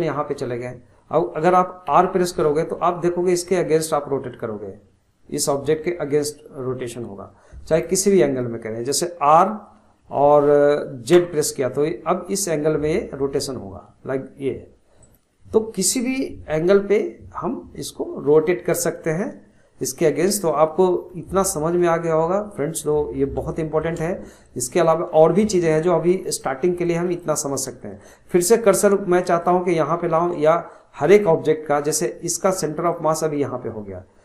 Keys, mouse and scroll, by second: 1.9 r, 9.8 r, 19.9 scroll down 1, 20.5-26.0 shift+middle drag, 26.0 scroll up 1, 26.2-31.1 shift+middle drag, 31.1 click, 32.1-34.2 shift+middle drag.